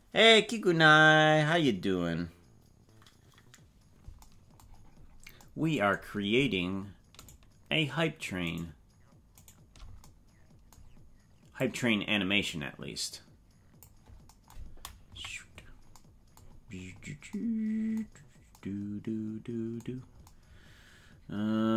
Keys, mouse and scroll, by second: 4.8-5.2 scroll down 8, 7.2 shift+right click, 8.6 shift+right click, 9.4 shift+right click, 11.6-13.8 drag, 15.0 KP_Decimal, 16.5-17.2 scroll up 6, 18.1 scroll up 2.